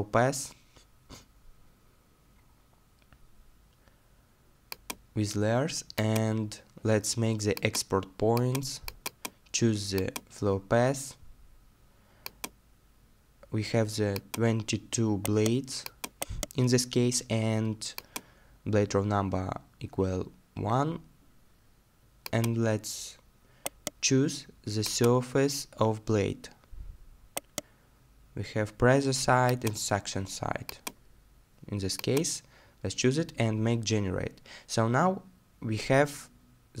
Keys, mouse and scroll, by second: 15.2-18.2 scroll down 1, 18.7 middle click, 22.6 middle click, 23.7 right click, 26.5 scroll down 1, 27.4 right click, 32.4-33.6 scroll down 1, 33.9 middle click, 34.7-35.4 scroll down 1.